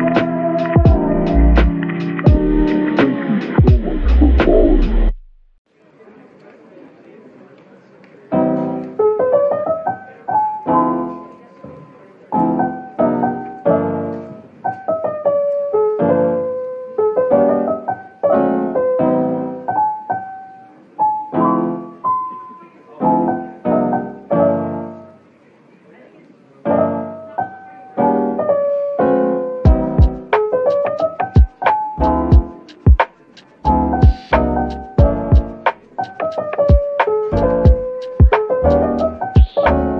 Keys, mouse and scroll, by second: 3.4 middle click, 4.1-4.5 scroll down 1, 4.8-5.8 typing, 6.0 middle click, 8.0-9.4 typing, 14.4 scroll up 1, 15.2-16.6 typing, 18.3 Tab, 19.0 typing, 19.9 shift+click, 22.0 shift+click, 24.8 shift+click, 28.0 typing, 30.4 Tab, 31.1-32.1 typing, 36.2 shift+click, 37.3 ctrl+j, 37.8 Tab, 38.2-38.6 scroll down 1, 38.6 middle click, 39.7 Tab.